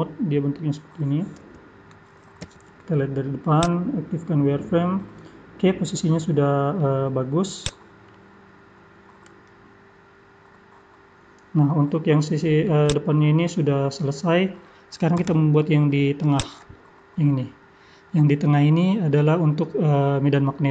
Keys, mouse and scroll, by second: 1.4 KP_3, 2.4 KP_1, 3.6 click, 4.1-4.5 scroll up 8, 5.0 scroll down 1, 5.1-5.5 scroll down 6, 6.3 middle click, 7.6 click, 8.0 middle click, 11.9-12.8 scroll down 2, 12.8 click, 13.6 scroll down 2, 14.1 middle click.